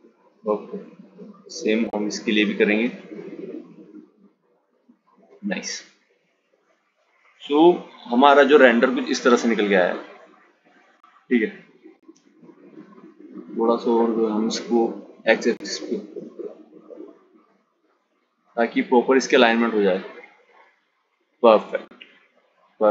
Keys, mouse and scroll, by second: 1.4 g, 5.8 click, 9.8 click, 11.0 g, 17.9 click, 19.0 click, 20.1 click.